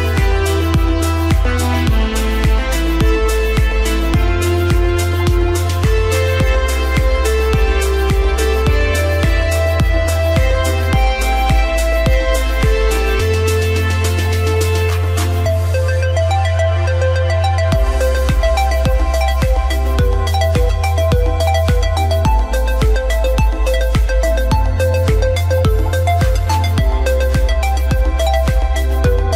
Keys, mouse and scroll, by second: 5.7 click, 12.0 click.